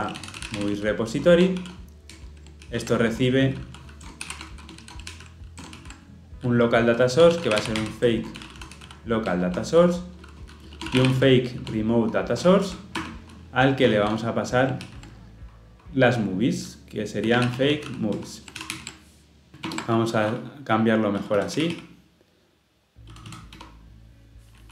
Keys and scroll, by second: 2.2 Return, 2.6 ctrl+p, 9.2 ctrl+p, 13.0 Return, 18.1 ctrl+p, 18.1 Return, 18.5 ctrl+alt+l, 18.7 ctrl+alt+o, 19.6 alt+Return.